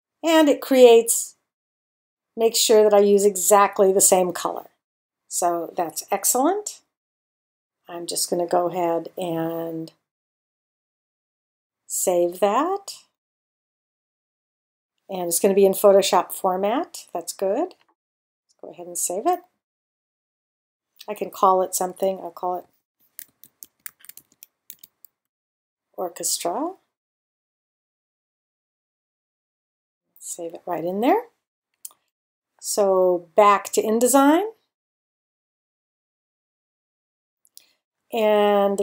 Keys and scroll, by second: 22.5-25.3 typing.